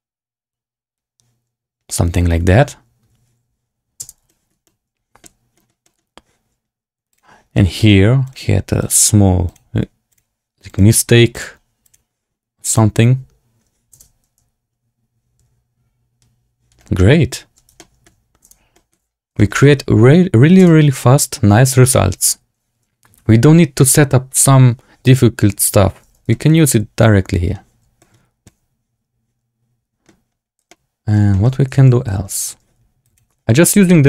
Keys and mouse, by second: 3.9 space, 4.2 shift+drag, 4.6-5.1 drag, 5.5 click, 5.7 drag, 7.2 click, 7.7 shift+click, 8.2 click, 9.4 click, 10.0 click, 11.2 click, 11.8 click, 12.6 click, 13.8 space, 17.9 shift+drag, 18.4 space, 18.6 click, 18.9 z, 19.3 shift+drag, 19.5-20.4 drag, 20.5 space, 25.9 space, 26.2 shift+drag, 26.4-27.5 drag, 27.9 shift+drag, 28.4-30.0 middle drag, 30.6-31.1 shift+middle drag, 31.2 shift+middle drag, 32.0 z, 33.0 click, 33.9 shift+middle click.